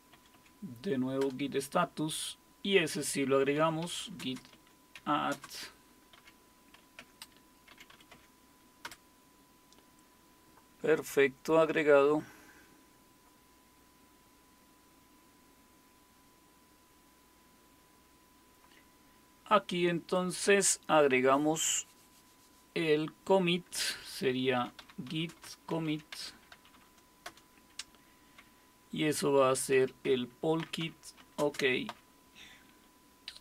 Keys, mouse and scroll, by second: 0.1 Up, 0.3 Up, 1.0-1.7 typing, 3.3-8.2 typing, 7.0 Tab, 8.8 Return, 11.6 click, 13.3 F5, 14.1-16.6 scroll down 1, 20.1-24.7 drag, 24.4-27.2 typing, 29.3-32.4 typing.